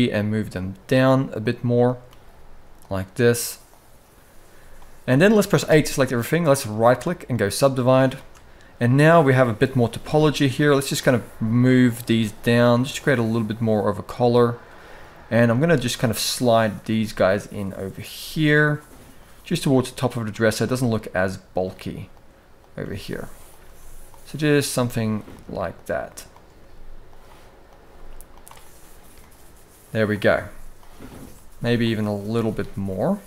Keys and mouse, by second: 1.6 click, 1.8 g, 4.5 shift+middle click, 5.3 a, 6.6-7.2 right drag, 7.9 shift+middle click, 9.5 g, 10.7 g, 11.7 g, 15.2 g, 16.6 g, 17.7 click, 17.8 g, 18.9 click, 19.1 g, 20.2 click, 20.4 g, 21.8 click, 22.5 g, 23.4 g, 24.4 g, 25.4 click, 26.3 g, 27.4 click, 27.5 g, 29.8 click, 30.0 g, 30.8 click, 31.0 g, 31.9 click, 32.1 g.